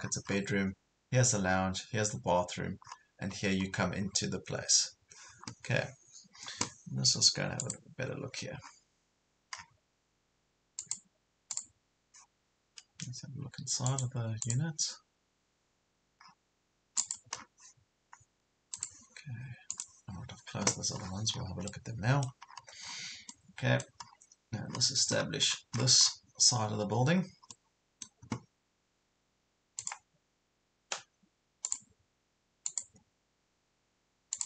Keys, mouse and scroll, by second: 1.5 scroll up 1, 2.4 scroll down 1, 2.9 scroll up 1, 4.1 scroll down 1, 7.6 click, 8.6 scroll down 1, 10.8-16.2 drag, 16.2-17.0 scroll down 1, 17.0 click, 17.4-18.7 scroll down 1, 18.7 click, 21.0-21.6 scroll down 2, 21.7 middle click, 22.5 scroll up 1, 23.3 middle click, 25.2 scroll down 1, 26.7 scroll up 1, 27.5-29.0 middle drag, 29.8 click.